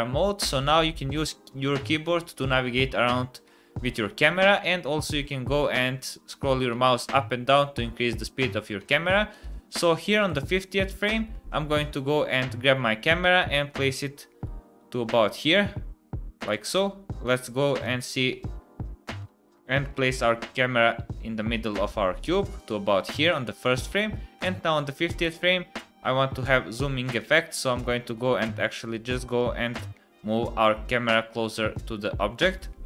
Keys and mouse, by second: 4.8 middle click, 10.2 click, 11.5 shift+`, 17.2 click, 18.3 d, 19.2 shift+`, 24.4 click, 25.8 shift+`.